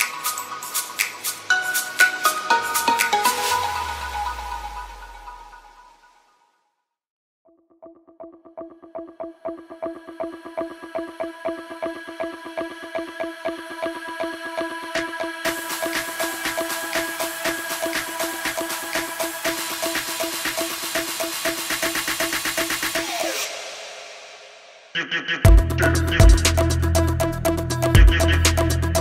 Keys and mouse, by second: 0.9 a, 1.2 shift+click, 2.0 2, 3.1 1, 5.3-8.3 typing, 7.5 shift+click, 9.0 ctrl+z, 9.4 shift+click, 10.5 shift+click, 11.2 1, 11.7 shift+click, 12.5 ctrl+r, 13.9 shift+click, 14.6 ctrl+r, 16.9-18.0 drag, 18.3 ctrl+r, 22.7 ctrl+r, 24.6 ctrl+r, 28.0 click.